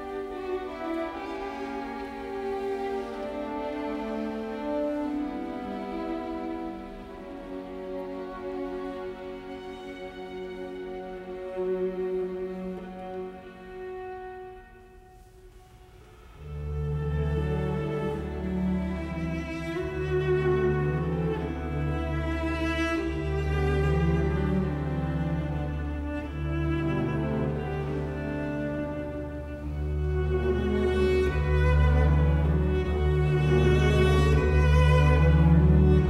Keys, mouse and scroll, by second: 1.0 Escape, 3.8 space, 5.6 KP_Decimal, 6.0 Return, 6.8 space, 10.4 f, 10.6 space, 11.9 Escape, 12.5 space, 13.7 f, 13.9 space, 15.2 Escape, 22.8 middle click, 25.4 t, 25.5 space, 28.0 KP_0, 28.1 Return, 30.2 middle click, 32.9-33.4 typing.